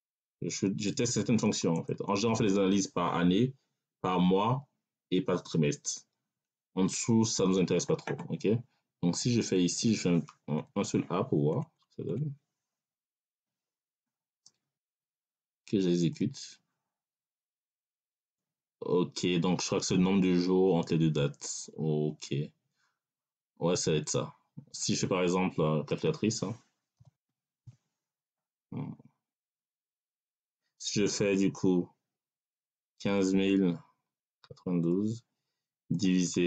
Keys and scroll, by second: 10.5 Right, 11.4 BackSpace, 13.2 a, 26.9 c, 27.2 a, 27.5 l.